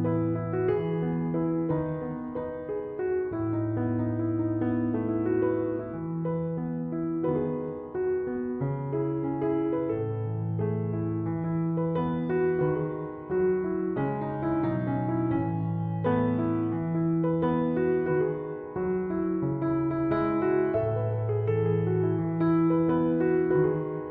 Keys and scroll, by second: 12.5 Return, 17.8 2, 18.1 ., 18.3 2, 18.5 5, 18.8 Return.